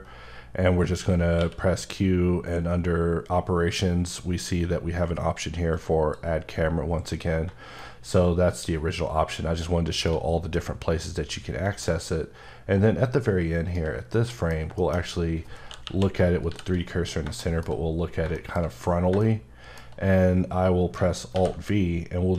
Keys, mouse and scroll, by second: 1.4 q, 5.7 click, 7.8 right click, 12.0 shift+right click, 14.1 middle click, 14.5 scroll down 1, 14.8 shift+middle click, 15.0-15.8 scroll up 1, 15.8 KP_1, 16.4 c, 17.0 scroll up 2, 17.4 shift+middle click, 18.1 scroll down 2, 18.3 shift+middle click, 18.6-18.9 shift+scroll up 3, 19.2 middle click, 21.2 alt+scroll down 1, 21.3 alt+v.